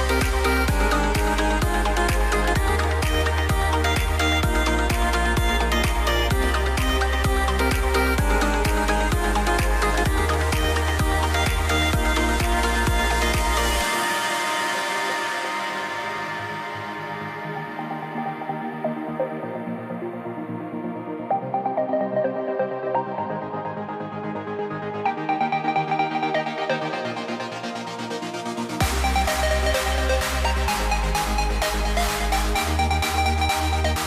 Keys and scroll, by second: 7.2 a, 8.4 super+a, 17.0 a, 17.4 a, 18.9 a, 19.3 v, 19.6 super+a, 20.9 super+z, 24.9 a, 26.9 a, 27.7 BackSpace, 27.9 super+z, 31.4 a.